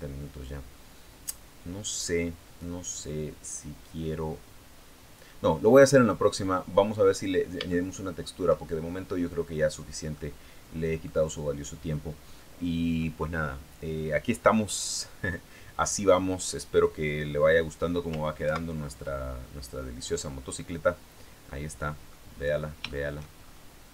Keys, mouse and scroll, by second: 4.6-4.9 scroll down 2, 5.5 middle click, 6.2-6.5 scroll up 2, 6.9 scroll up 2, 7.5 shift+middle click, 8.7 shift+scroll down 3, 9.9-11.0 middle drag, 15.4-16.0 scroll down 2, 18.3 ctrl+Right, 19.7-20.2 scroll down 2, 20.5-20.8 scroll down 2, 21.3 middle click, 22.1-22.6 scroll down 3, 22.6 shift+middle click, 23.2-23.5 shift+scroll up 3.